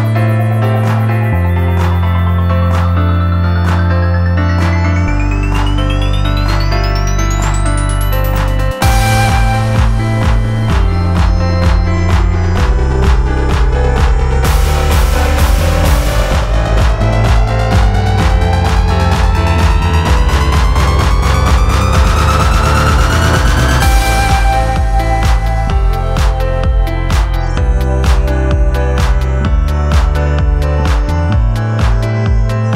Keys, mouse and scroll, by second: 1.2 shift+e.